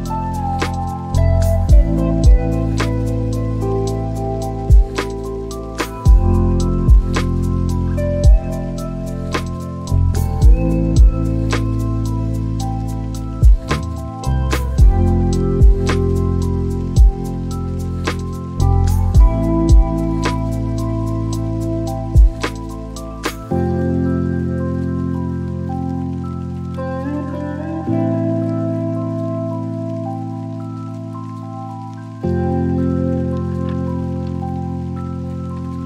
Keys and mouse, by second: 14.8 click, 15.1 shift+a, 26.6 click, 29.5 click, 34.3 click.